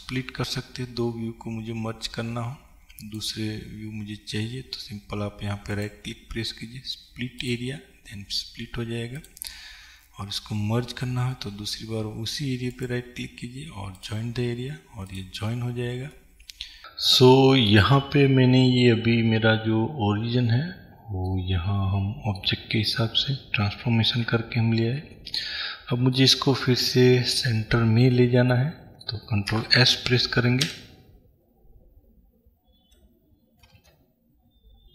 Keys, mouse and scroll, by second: 0.3 click, 1.7 click, 2.6-7.6 drag, 7.6-9.5 right drag, 9.5 click, 14.2-16.2 right drag, 16.2-29.5 middle drag, 24.4 n, 30.8 Escape, 30.8-32.0 middle drag, 33.7 space.